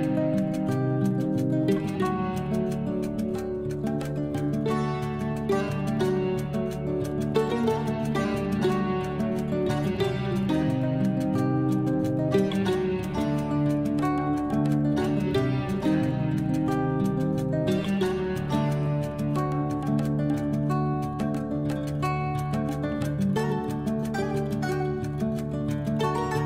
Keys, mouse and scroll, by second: 0.7-1.3 scroll down 1, 1.3 click, 2.5 shift+right click, 3.3 a, 3.6 a, 3.9 a, 4.3-4.6 scroll down 3, 4.9 shift+right click, 5.5 shift+right click, 6.3 shift+right click, 6.9 shift+right click, 7.6 shift+right click, 8.0 click, 8.8 shift+right click, 9.1 shift+right click, 9.6 shift+right click, 10.6 c, 13.0-13.3 scroll down 1, 14.1 shift+right click, 14.5 shift+right click, 15.3 click, 15.9 scroll down 4, 16.8 click, 17.7 shift+right click, 18.0 shift+right click, 18.6 click, 19.2 scroll up 2, 20.1 g, 21.7-22.2 scroll up 2, 22.2 click, 23.4 shift+d.